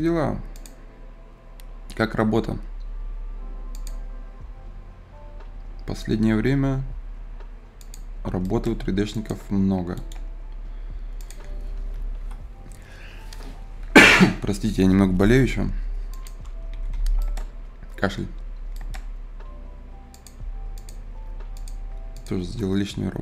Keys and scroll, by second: 12.1 Return, 12.2 Return, 16.7 Escape.